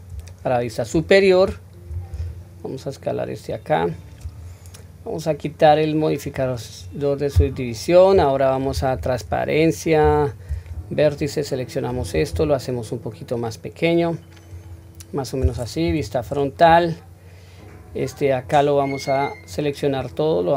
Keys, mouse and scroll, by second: 0.3 shift+middle click, 0.3-0.7 scroll up 1, 2.2 s, 6.2 click, 8.9 q, 10.0 1, 10.5 click, 12.3 s, 15.9 KP_1, 17.9-18.4 drag, 19.5-19.9 drag.